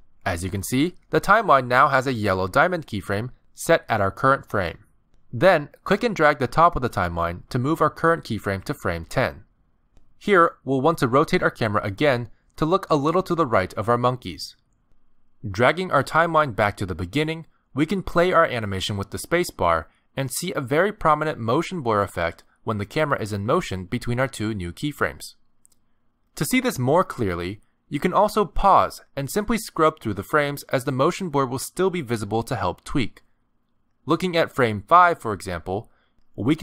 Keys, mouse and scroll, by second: 7.6 click, 11.6 r, 13.9 r, 17.0 click, 18.3 space, 19.4 space, 19.8 click, 20.6 space, 21.7 space, 21.9 click, 23.0 space, 24.4 space, 24.6 click, 25.7 space, 26.8 space, 27.1 click, 30.4 Right, 30.7 Right, 30.9 Right, 31.1 Right, 31.4 Right, 35.0 click, 35.7 click.